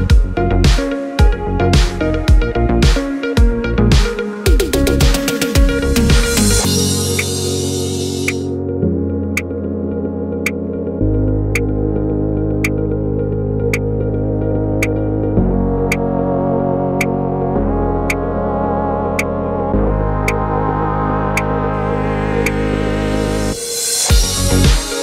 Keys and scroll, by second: 0.8 2, 1.4 0, 2.6 6, 2.9 Return.